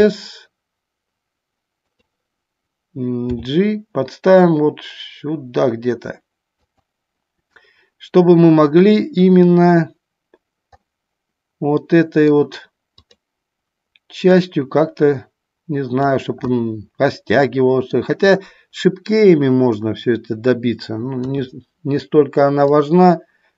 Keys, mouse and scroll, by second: 3.5 g, 6.8 click, 11.1-12.6 middle drag, 14.6-16.2 drag, 16.7-18.2 middle drag, 21.3 KP_3.